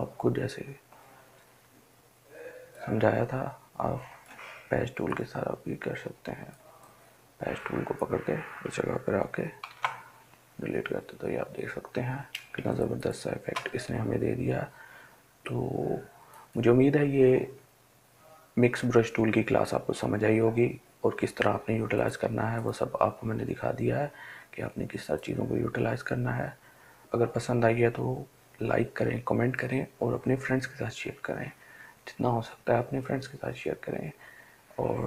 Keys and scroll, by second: 9.9 ctrl+d, 12.7 ctrl+space.